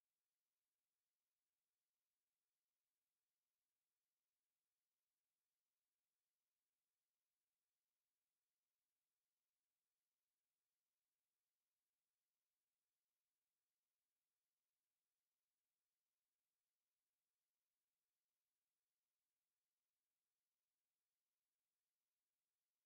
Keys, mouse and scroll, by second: 4.9 click, 6.4 click, 8.3 right click, 10.6 click, 12.1 click, 13.5 click, 15.5 KP_1, 15.7 KP_Decimal, 16.0 KP_5, 16.2 KP_Enter, 17.7 click, 18.2-18.6 scroll down 1, 18.8 click, 20.7 click.